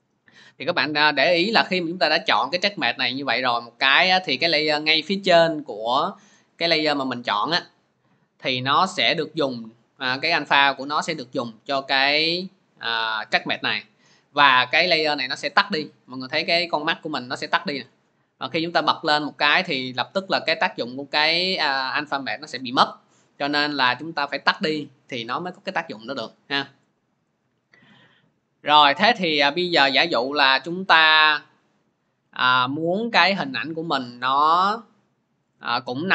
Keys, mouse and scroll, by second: 2.0 click, 3.4 click, 12.2 click, 14.5-23.6 drag, 24.3 click, 26.8 click, 35.4 click.